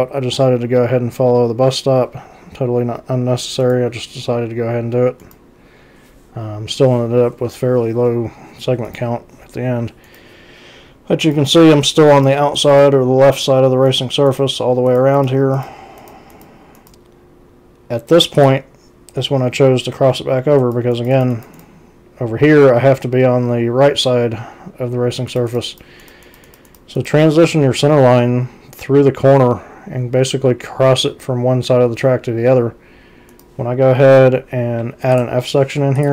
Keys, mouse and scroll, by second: 3.6 c, 5.2 c, 8.9 ctrl+c, 10.0 ctrl+c, 11.2 ctrl+c, 13.9 ctrl+c, 15.5 c, 18.4 click, 20.6 ctrl+c, 21.1 ctrl+c, 25.3 ctrl+c, 26.2 ctrl+c, 26.7 ctrl+c, 33.3 ctrl+c, 34.2 z, 35.1 right click, 36.0 click.